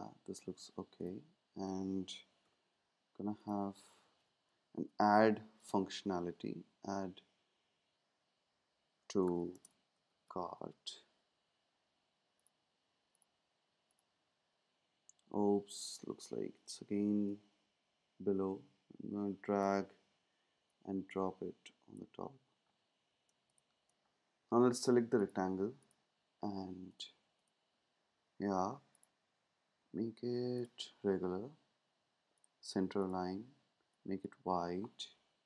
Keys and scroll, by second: 2.4 t, 4.7-5.7 typing, 9.0-11.1 typing.